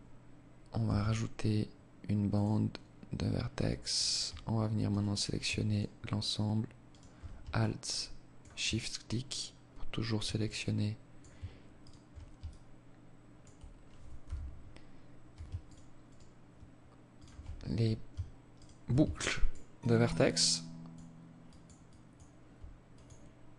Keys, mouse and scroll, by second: 3.8 alt+right click, 4.6 alt+shift+right click, 5.8 alt+shift+right click, 6.5 alt+click, 9.4 alt+click, 10.7 alt+shift+right click, 11.4 alt+click, 13.1 z, 14.6 alt+shift+right click, 15.2 alt+shift+right click, 16.1 alt+shift+right click, 17.5 shift+right click, 18.1 alt+click, 18.7 alt+click, 19.3 alt+click, 20.4 alt+click, 20.8 alt+click.